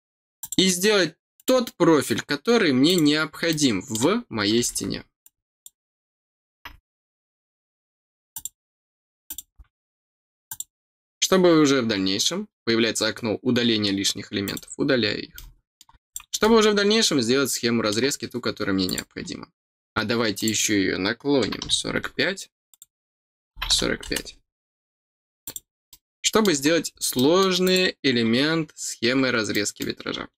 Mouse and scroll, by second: 0.3 click, 1.3 click, 2.8 click, 3.4 middle click, 5.2 click, 8.3 click, 9.2 click, 10.4 click, 14.4 click, 15.3 middle click, 16.0 click, 16.3-17.8 middle drag, 18.8 click, 20.3 click, 22.6 click, 25.4 click, 25.8 middle click, 26.6 scroll down 3, 27.1 middle click, 27.6 click, 28.6-29.0 scroll down 1, 29.4 middle click.